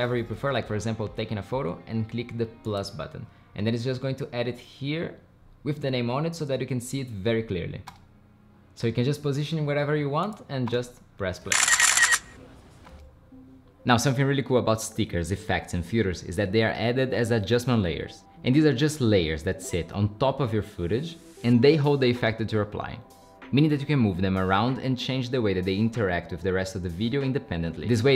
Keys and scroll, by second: 7.9 space, 10.7 space, 12.9 space.